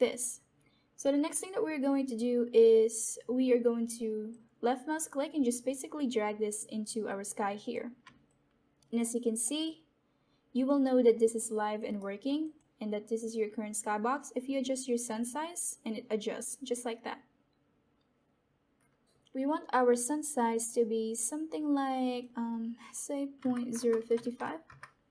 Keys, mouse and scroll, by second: 1.2 click, 4.2-8.0 drag, 8.2 alt+click, 8.9 alt+middle click, 9.6 alt+click, 10.7 alt+middle click, 11.3 alt+click, 11.9 alt+middle click, 12.4 alt+click, 15.0-19.3 drag, 22.0 click, 23.0 typing, 24.6 typing.